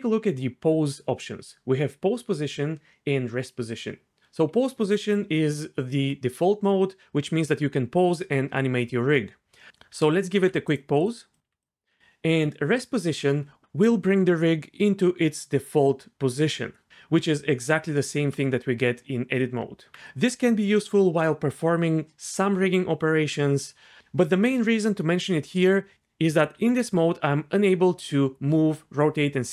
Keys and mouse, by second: 10.4 r, 11.5 r, 11.6 click, 17.3 Tab, 19.6 Tab, 25.9 r, 26.5 r.